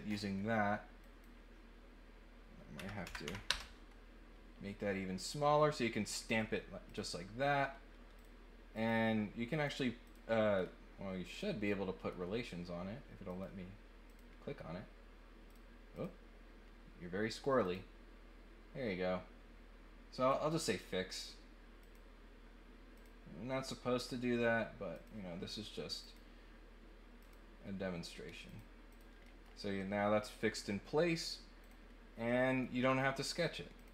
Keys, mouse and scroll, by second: 1.0 click, 5.1 click, 6.8 click, 8.1 click, 8.7 click, 9.5 click, 10.0 click, 10.3 middle click, 11.2 click, 11.6 middle click, 13.2 click, 14.0 click, 15.4 click, 15.9 click, 17.6 click, 20.3 click, 20.6 click, 21.8 click, 22.9 click, 24.9 click, 26.0 click, 27.2 click, 28.4 click, 28.9 click, 29.2 middle click, 30.2 click, 31.6 click, 32.3 middle click, 33.7 click.